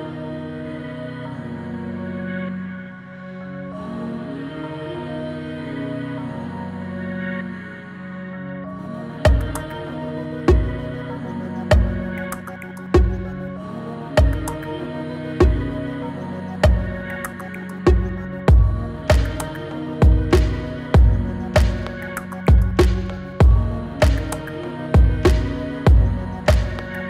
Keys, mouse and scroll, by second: 0.4-3.5 drag, 12.1-12.7 click, 19.1 click, 21.3-26.2 drag.